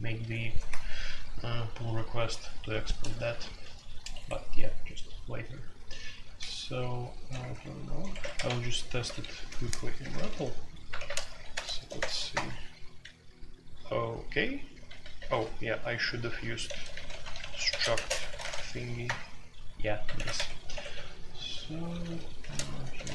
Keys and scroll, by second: 3.2 typing, 4.1 Escape, 6.0-11.7 typing, 8.1 Escape, 10.9 alt+2, 11.9 shift+Insert, 12.3 Return, 14.6-18.4 typing, 18.1 Escape, 19.0 Return, 20.1 alt+1, 20.3 Escape, 20.7-23.1 typing.